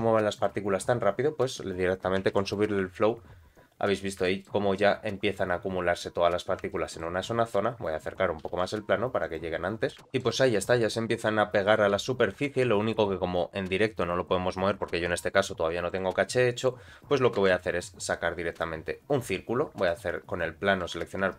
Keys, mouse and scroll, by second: 0.3 click, 2.3 shift+Left, 2.6 space, 3.7-4.2 scroll up 1, 4.2 shift+middle click, 5.3 scroll up 2, 6.7 shift+middle click, 7.1 shift+middle click, 7.4-8.5 scroll down 1, 8.5 g, 10.0 scroll up 1, 10.1 shift+middle click, 10.3-11.7 middle drag, 12.0 g, 17.1 scroll down 2, 17.4 shift+a, 19.8 click.